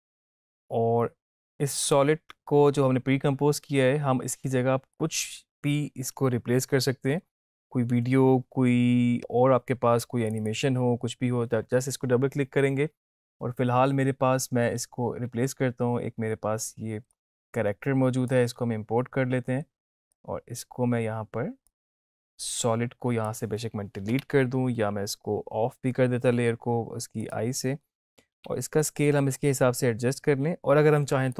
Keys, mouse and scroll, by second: 5.0-7.9 drag, 10.3 click, 14.9 alt+Tab, 17.3 click, 17.5-18.5 alt+Tab, 20.3-21.8 drag, 27.3 click, 28.5 s, 29.8-31.3 drag.